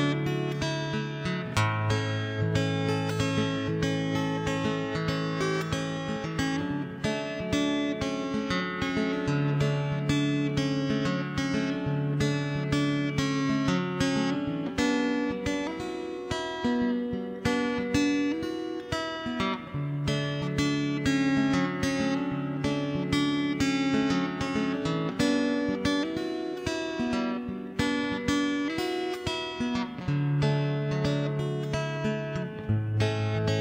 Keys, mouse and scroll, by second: 0.1 middle click, 1.1 right click, 1.5 ctrl+j, 1.7 middle click, 2.6 ctrl+KP_3, 2.6 middle click, 2.8 z, 3.7 middle click, 4.3 z, 4.5 middle click, 5.4 middle click, 6.1 middle click, 6.8 middle click, 7.5 z, 7.8 Tab, 7.9 Tab, 8.8 Tab, 8.9 middle click, 9.8-10.9 middle drag, 11.0-12.4 middle drag, 12.4 z, 13.2 right click, 13.6 g, 14.4 middle click, 14.9 middle click, 15.8 g, 16.9 right click, 17.3 z, 17.4 middle click, 18.1 right click, 18.7 middle click, 19.3 z, 19.5 click, 20.6-22.7 middle drag, 22.7 Tab, 23.2 middle click, 24.4 ctrl+s, 25.3 click, 25.7 0, 25.9 right click, 26.3 middle click, 27.2 shift+space, 27.6 right click, 28.6 middle click, 28.7 shift+space, 29.1 middle click, 29.7 Tab, 30.5 right click, 30.7 z, 31.1-32.7 middle drag, 32.7 c, 32.9 a, 32.9 a, 33.1 c.